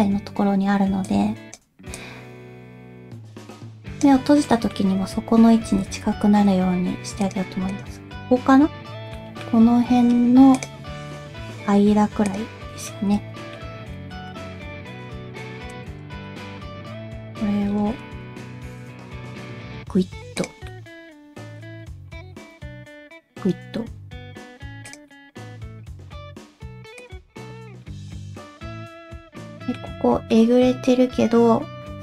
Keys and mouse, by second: 1.0 click, 2.0-4.0 drag, 4.5 middle click, 5.2 Tab, 5.8 alt+z, 6.7 2, 7.2 click, 7.7 click, 8.1 middle click, 9.2 middle click, 10.6 click, 12.9 middle click, 13.9 middle click, 14.3 1, 15.0 alt+a, 15.2 c, 16.3 middle click, 16.4 KP_1, 17.2 g, 20.7 middle click, 22.5 g, 25.1 middle click, 26.0 g, 27.3 alt+z, 27.4 middle click, 27.9 shift+middle click, 28.1-29.8 middle drag, 30.3-32.0 middle drag.